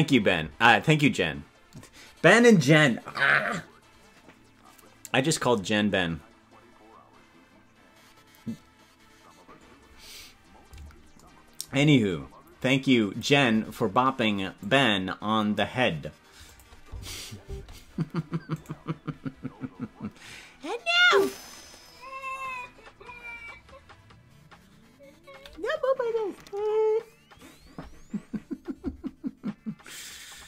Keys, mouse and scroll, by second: 12.6 click, 14.5-15.5 drag, 16.5 click, 16.8 space, 18.9 right click.